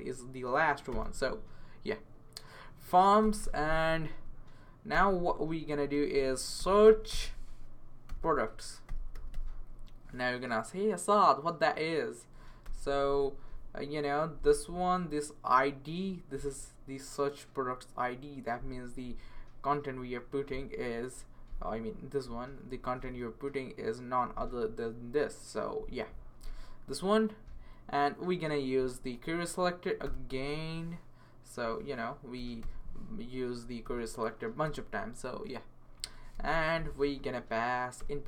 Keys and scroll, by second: 0.0-1.4 typing, 2.9-9.8 typing, 4.1 Left, 12.3 Page_Down, 12.6 Return, 22.4-23.5 typing, 32.1-34.1 typing, 34.6 Return, 36.1-38.2 typing, 37.3 Left.